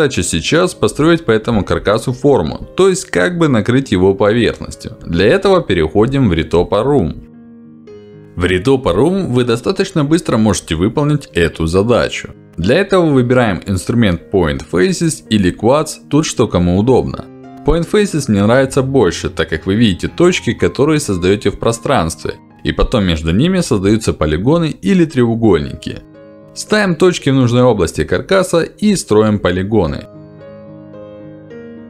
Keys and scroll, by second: 1.7 q, 21.4 ctrl+z, 23.5 f.